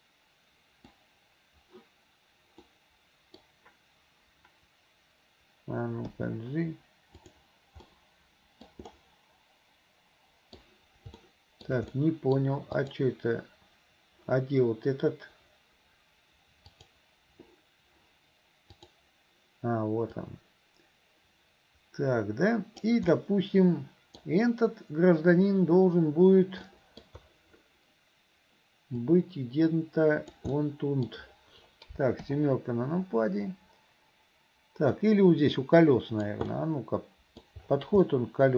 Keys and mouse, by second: 2.8 middle click, 7.9 click, 7.9 right click, 8.9-10.7 middle drag, 11.4 shift+click, 11.4 shift+right click, 12.1 middle click, 12.8 click, 16.7 click, 18.8 click, 20.3-23.2 drag, 23.2-24.3 middle drag, 26.9 middle click, 29.1-30.4 drag, 30.6 middle click, 32.3 KP_7, 35.2-36.4 drag, 36.6 middle click, 38.1-38.5 middle drag.